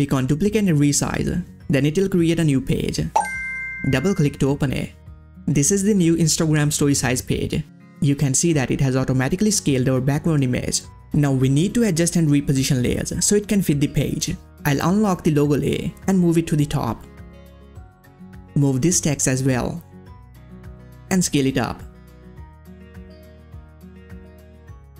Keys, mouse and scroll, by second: 0.1 click, 0.2 click, 4.8 click, 4.8 click, 6.5 ctrl+scroll up 1, 7.8 space, 7.9 click, 8.2 space, 9.7 space, 10.8 click, 15.8 click, 15.8-24.7 drag, 24.7 click.